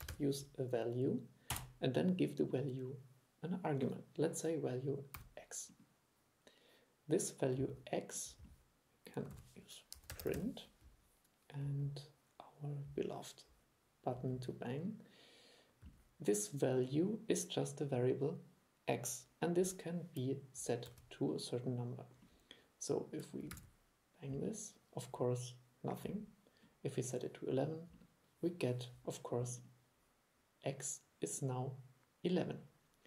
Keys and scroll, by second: 9.4 super+1, 21.0 super+3, 23.6 super+e.